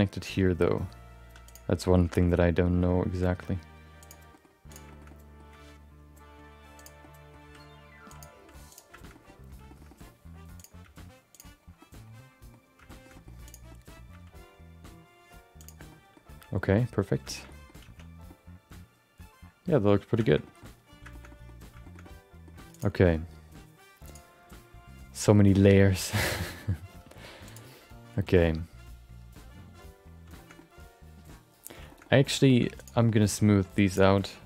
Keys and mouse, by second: 1.2 3, 1.4 click, 2.0 g, 4.3 middle click, 4.7 click, 4.9 shift+middle click, 5.0 middle click, 5.5 g, 7.0 middle click, 7.4 r, 8.3 g, 9.1 middle click, 9.6 shift+middle click, 9.8 middle click, 10.6 click, 11.3 g, 11.8 middle click, 12.9 shift+middle click, 13.1 middle click, 13.4 click, 13.6 middle click, 14.1 g, 15.9 middle click, 16.5 shift+middle click, 16.7 middle click, 17.2 shift+middle click, 17.4 middle click, 18.1 Tab, 18.3-19.8 middle drag, 20.2 shift+middle click, 20.4 middle click, 21.1 shift+middle click, 21.3 middle click, 21.8 middle click, 22.0 middle click, 24.0-29.6 drag, 30.3 shift+middle click, 30.5-31.7 middle drag, 31.8 shift+middle click, 32.0 middle click, 32.5 shift+middle click, 32.8 click, 33.9 click.